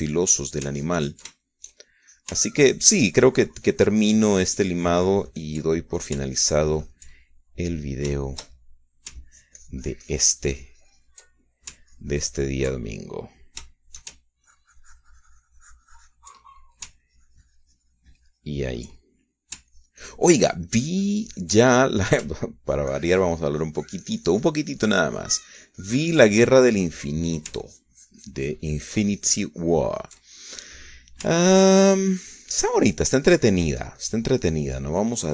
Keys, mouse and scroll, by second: 2.4-3.4 ctrl+drag, 3.7-7.8 ctrl+shift+drag, 7.8 ctrl+middle click, 7.9-9.7 ctrl+drag, 9.8 shift+middle click, 10.9-13.4 ctrl+shift+drag, 13.5 ctrl+click, 14.5 ctrl+click, 15.0 ctrl+shift+click, 16.1-18.5 ctrl+drag, 18.7-21.0 ctrl+drag, 21.3-23.7 ctrl+drag, 24.3-28.5 ctrl+drag, 28.6 click, 29.3-32.3 ctrl+drag, 32.3 middle click, 33.1-35.3 ctrl+drag.